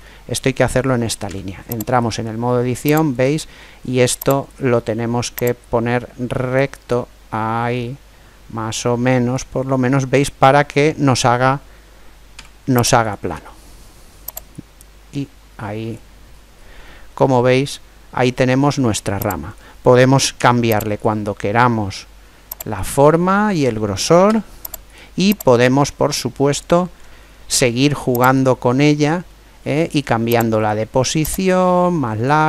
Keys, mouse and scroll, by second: 1.0 Tab, 2.9-6.1 right drag, 5.4-7.1 drag, 9.5-11.2 middle drag, 12.1 Tab, 14.3-16.1 drag, 16.1-18.6 middle drag, 19.3 right click, 20.1 Tab, 22.6-24.3 drag, 24.0 Tab, 25.3 right click, 27.2 middle click, 27.4 Tab, 29.0-30.4 middle drag, 30.4 right click, 31.1 click, 32.0 right click.